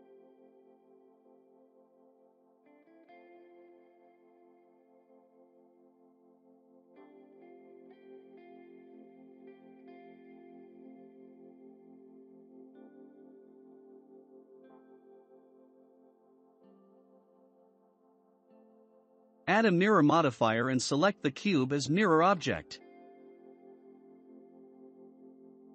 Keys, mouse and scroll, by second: 0.8 click, 1.8-4.0 shift+middle drag, 4.0 click, 6.1-6.4 scroll down 1, 6.4-8.5 shift+middle drag, 8.5-8.8 scroll up 4, 9.4 click, 10.6 click, 12.5-13.0 scroll down 5, 13.0 middle click, 13.6 Tab, 13.9 scroll down 5, 14.4 shift+middle click, 15.4-15.7 scroll up 3, 15.7-17.2 shift+middle drag, 17.3 click, 20.4-21.1 drag, 22.6 click.